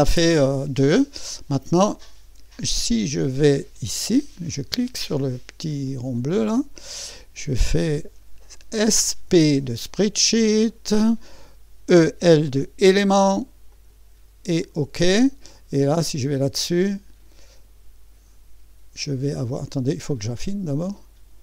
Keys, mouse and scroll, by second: 1.5 click, 4.0 click, 5.9 click, 8.9 s, 10.4-12.2 typing, 10.7 click, 13.7 click, 14.6 click, 20.1 click.